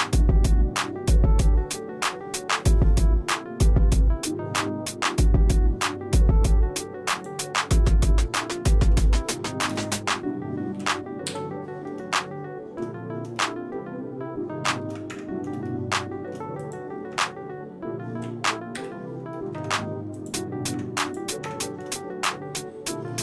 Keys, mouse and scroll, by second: 0.1-0.7 scroll up 3, 2.5 e, 7.6 shift+middle click, 8.7 shift+middle click, 9.7 ctrl+KP_Add, 11.3 y, 12.2 shift+middle click, 13.4-15.1 shift+middle drag, 15.1 Tab, 15.7 shift+middle click, 16.6 click, 17.1 Tab, 18.8 y, 19.4 middle click, 19.5 Tab, 20.2 click, 20.7 Tab, 21.1 click, 21.5 Tab, 22.0 shift+middle click.